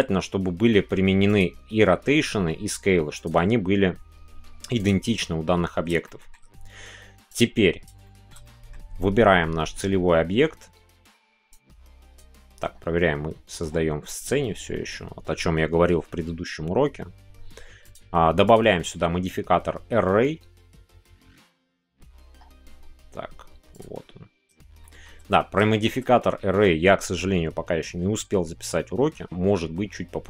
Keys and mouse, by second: 4.7-5.9 drag, 6.0-7.2 shift+middle drag, 7.2 click, 8.0 shift+middle click, 8.4-12.1 middle drag, 12.1-24.5 drag, 24.8 shift+middle click, 25.3 middle click, 25.7 shift+middle click.